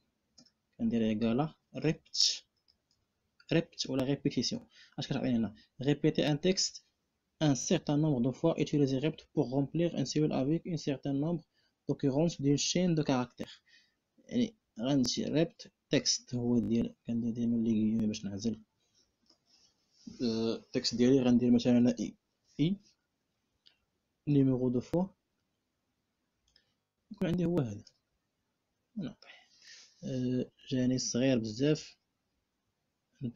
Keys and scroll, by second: 0.1 =, 1.4 r, 1.6 e, 2.2 p, 16.6 3, 21.4 shift+i, 23.0 3, 24.1 ., 27.6 Return.